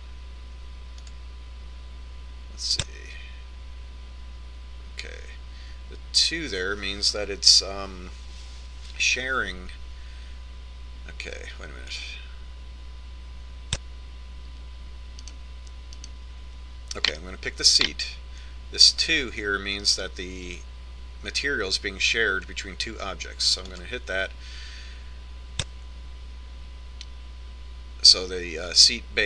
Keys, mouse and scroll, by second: 2.8-4.3 drag, 13.6-15.4 drag, 17.8-19.4 right drag, 25.5-27.3 drag.